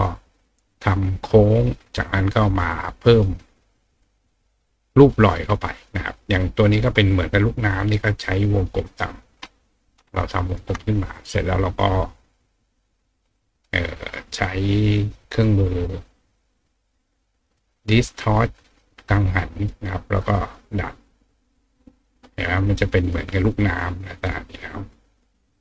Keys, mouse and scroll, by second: 3.7-4.9 drag, 8.2 click, 8.9-10.6 drag, 12.3-17.6 drag, 18.6 click, 19.7-22.0 drag, 23.0 click, 23.8 click, 24.5 click, 25.1 click.